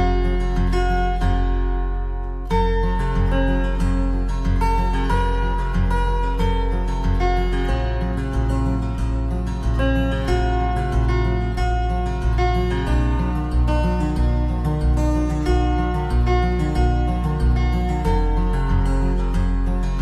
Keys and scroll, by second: 5.9 ctrl+c, 6.0 ctrl+v, 12.7 ctrl+-.